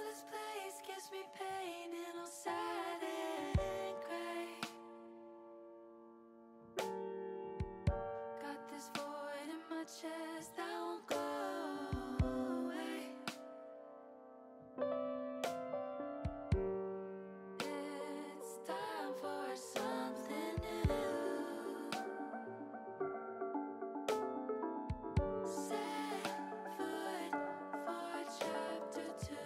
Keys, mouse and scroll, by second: 0.7 ctrl+r, 4.1 click, 5.0 middle click, 6.9 ctrl+r, 14.2 middle click, 15.8 ctrl+r, 18.3 click, 19.4 middle click, 22.4 click, 25.1-26.6 drag, 25.1-26.6 right drag, 26.9-29.4 drag, 26.9-29.4 right drag.